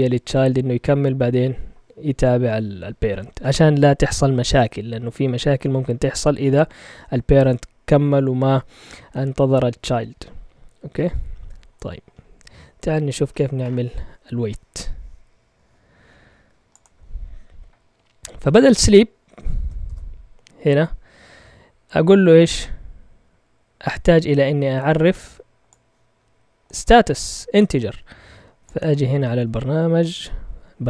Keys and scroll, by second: 19.8 ctrl+Tab, 29.6 Up, 29.9 typing.